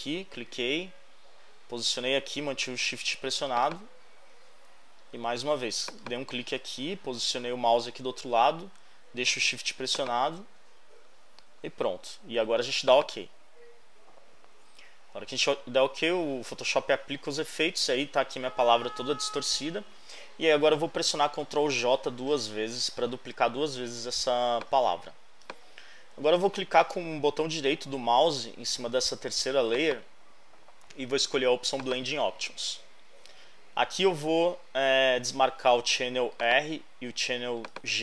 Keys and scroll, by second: 22.3 super+j.